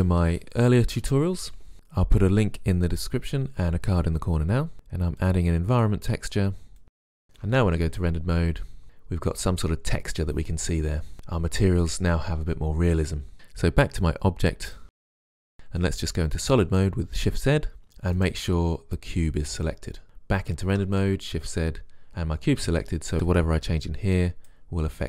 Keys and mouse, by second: 1.1 click, 3.3 click, 3.8 shift+a, 4.6 click, 5.0 click, 6.9 Return, 7.7 shift+z, 18.3-20.0 right drag, 20.7 shift+z.